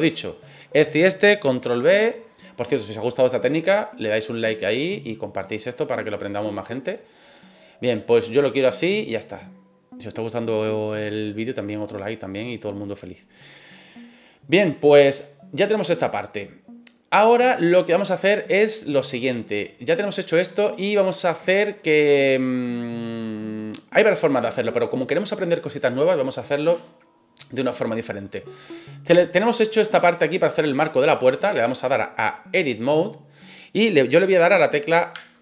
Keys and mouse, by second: 1.6 ctrl+b, 11.4 click, 14.0 middle click, 19.2 click, 20.2-20.6 middle drag, 21.4 click, 22.1-24.5 middle drag, 31.6-32.6 drag.